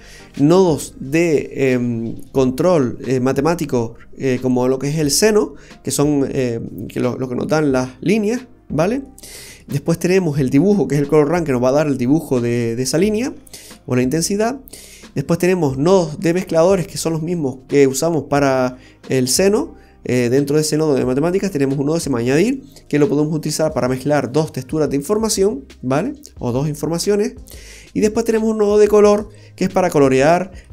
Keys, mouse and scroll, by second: 1.6-2.8 scroll up 6, 2.3 middle click, 2.8-3.1 scroll up 2, 8.6-9.1 scroll down 1, 9.1 middle click, 9.1 scroll down 2, 13.3-13.8 scroll down 2, 13.8 middle click, 14.8-15.5 scroll up 5, 17.3-17.7 scroll down 4, 18.0-18.4 scroll down 3, 28.0 scroll down 1, 28.2-29.1 scroll up 5, 28.9 middle click, 29.4-30.2 scroll up 3, 30.3 middle click.